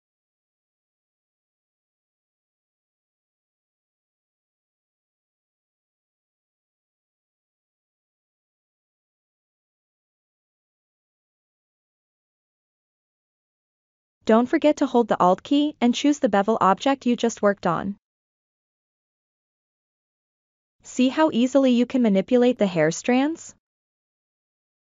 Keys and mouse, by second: 0.1-0.4 ctrl+middle drag, 0.6 ctrl+middle click, 1.1-2.1 middle drag, 2.4 ctrl+middle click, 2.8 shift+middle click, 3.1 shift+middle click, 3.5-4.2 ctrl+middle drag, 4.6 shift+middle click, 6.1 Tab, 6.6 click, 8.8-9.8 drag, 11.4 click, 14.5-15.7 alt+drag, 17.0-17.5 ctrl+middle drag, 17.9 click, 18.4-21.9 middle drag, 22.2-22.7 shift+middle drag, 22.9-23.9 middle drag, 24.1-24.4 ctrl+middle drag.